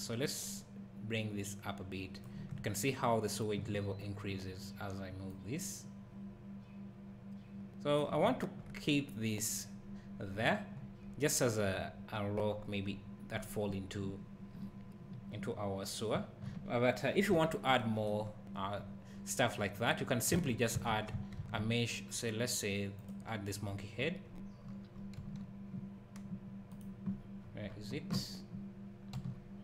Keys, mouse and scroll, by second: 0.2 click, 5.3 click, 8.3 `, 16.2 `, 17.3 KP_7, 18.6 scroll down 1, 19.8 click, 20.4 Tab, 21.4 shift+a, 23.7 scroll down 1, 24.7 scroll up 1, 25.2 g, 26.8 right click, 27.1-27.5 scroll down 1, 28.1 scroll up 1, 29.2 g.